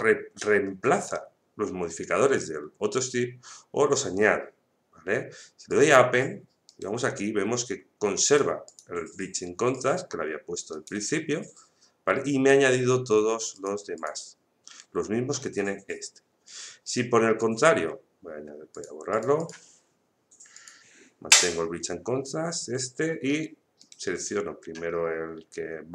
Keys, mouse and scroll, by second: 5.7 click, 6.6 right click, 8.3 click, 10.7 right click, 13.5 click, 15.3 right click, 18.7 click, 23.3 right click.